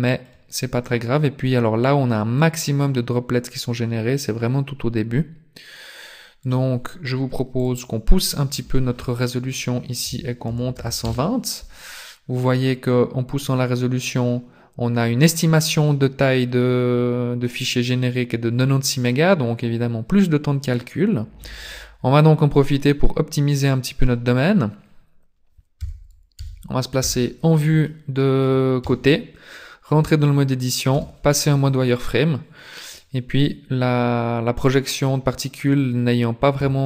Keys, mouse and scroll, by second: 0.8 click, 7.5 click, 22.6 middle click, 25.7 KP_3, 26.3 KP_5, 26.9 KP_5, 27.8 shift+middle click, 28.8 Tab, 30.9 z, 36.5 a.